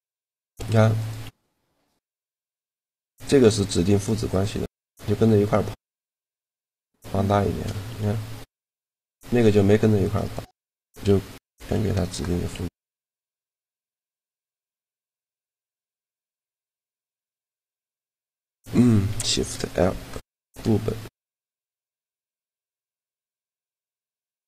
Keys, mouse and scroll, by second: 0.7-2.3 right drag, 1.0 g, 2.9-5.7 right drag, 3.2 g, 4.5 g, 6.0-7.7 middle drag, 7.7 g, 9.2-11.8 right drag, 11.0 ctrl+p, 12.3 a, 12.7 right click, 13.4 g, 15.6 g, 16.8 shift+g, 18.9 shift+l.